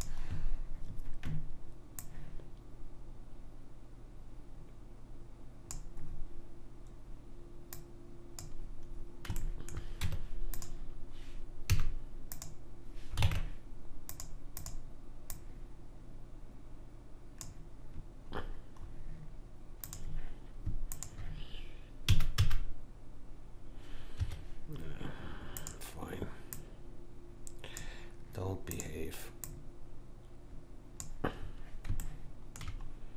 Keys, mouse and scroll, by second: 2.0 click, 6.1 middle click, 7.8 click, 10.0 Tab, 11.7 a, 12.3 click, 13.2 ctrl+Tab, 14.6 click, 18.4-19.9 middle drag, 19.9-22.8 drag, 22.1 s, 25.6 click, 28.7 click, 31.6-33.1 middle drag.